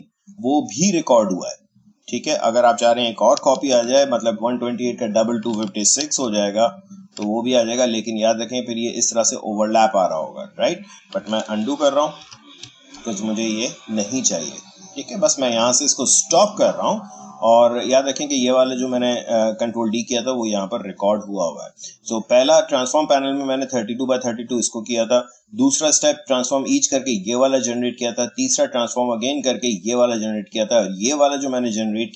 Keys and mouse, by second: 2.9 ctrl+d, 6.2 ctrl+d, 8.0-12.2 drag, 12.2 ctrl+z, 14.2-16.3 drag.